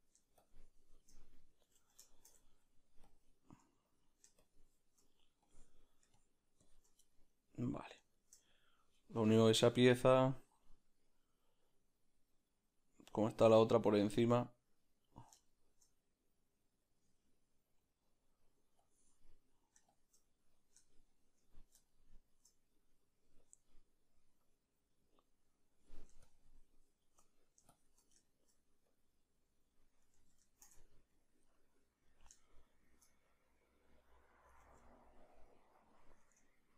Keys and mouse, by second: 1.8 ctrl+z, 2.0-3.0 shift+middle drag, 7.1-8.4 middle drag, 13.0 middle click, 14.0 ctrl+z, 14.0-15.1 middle drag, 15.1-36.7 drag, 16.1 middle click, 17.6-18.8 middle drag, 20.2-22.7 middle drag, 28.3 shift+middle click, 30.2 ctrl+z, 30.4-31.5 shift+middle drag, 32.4 shift+middle click, 34.6 ctrl+z, 36.5 Tab.